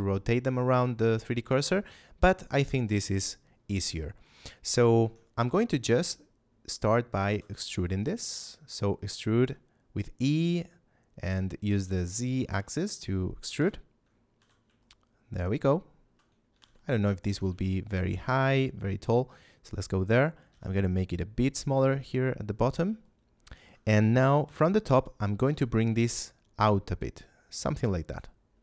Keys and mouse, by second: 2.4 middle click, 4.4 middle click, 4.9 Tab, 7.2 e, 7.5 z, 12.0 click, 12.7 shift+middle click, 13.5 KP_3, 14.3 z, 14.7 shift+middle click, 16.5 g, 16.5 z, 17.2 click, 17.6 shift+middle click, 18.3 g, 18.3 z, 18.9 click, 20.5 s, 22.6 click, 22.9 shift+middle click, 24.3 KP_7, 25.1 middle click, 25.4 z, 25.9 g, 27.6 click, 28.5 g.